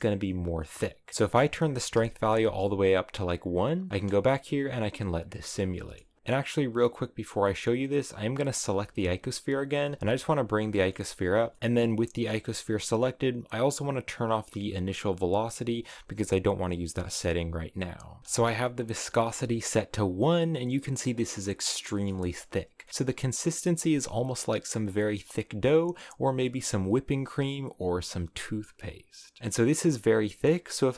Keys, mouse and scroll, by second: 1.2-2.3 drag, 3.5 click, 4.2 space, 4.4-6.2 middle drag, 6.2 z, 6.5 right click, 8.6 z, 8.9 middle click, 9.2-9.7 scroll down 1, 9.7 g, 10.6 middle click, 10.9 g, 11.4 middle click, 11.6 g, 15.3 click, 17.1-18.2 drag, 18.2 space, 19.1-21.3 shift+middle drag, 21.3-21.8 scroll up 2, 21.8-23.0 middle drag, 23.0-25.8 drag, 27.0-29.6 drag, 29.6-30.9 scroll down 3, 29.8 middle click.